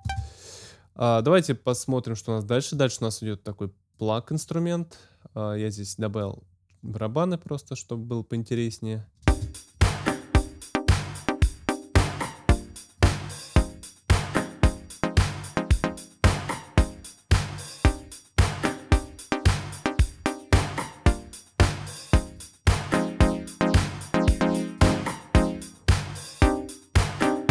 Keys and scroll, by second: 0.0 space, 9.2 space.